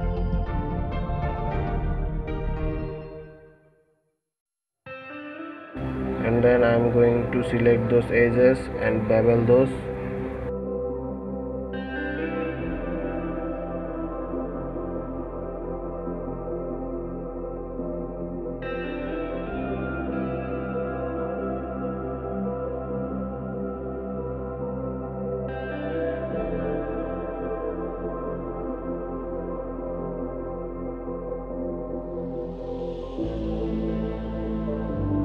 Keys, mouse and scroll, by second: 0.3-0.7 scroll up 2, 1.1-1.4 scroll down 2, 1.5 Tab, 2.0-3.8 middle drag, 3.8 Tab, 4.3-4.7 scroll up 2, 4.7-6.8 middle drag, 6.8 shift+click, 8.1 2, 9.1 click, 10.6 shift+click, 11.4 shift+click, 12.0 shift+click, 12.6-13.9 middle drag, 13.9 shift+click, 15.1 shift+click, 15.7 shift+click, 16.6 alt+shift+click, 17.5 alt+shift+click, 18.2 scroll down 2, 18.6-21.0 middle drag, 21.5 shift+click, 22.3 shift+click, 23.2 shift+click, 24.0 shift+click, 24.7-26.7 middle drag, 26.7 shift+click, 27.4-28.8 middle drag, 28.8-29.1 scroll up 2, 29.3 middle click, 30.2-30.7 scroll up 2, 30.8-32.7 middle drag, 32.7 alt+shift+click, 33.8-35.2 middle drag.